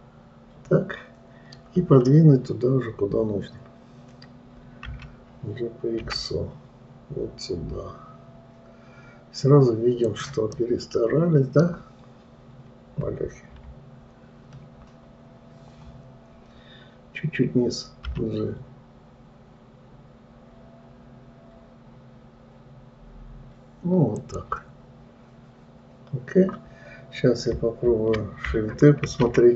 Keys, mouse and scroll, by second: 0.1-2.3 middle drag, 2.3-5.3 scroll down 4, 5.3 g, 11.0-13.9 middle drag, 13.9 KP_3, 14.8-15.2 scroll up 2.